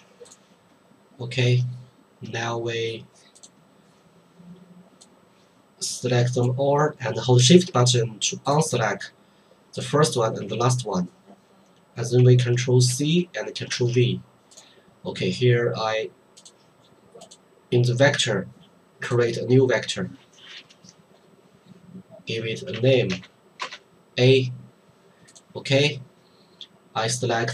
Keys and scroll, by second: 12.9 ctrl+c, 13.7 ctrl+v, 22.8 a, 23.1 Return, 23.6 Return.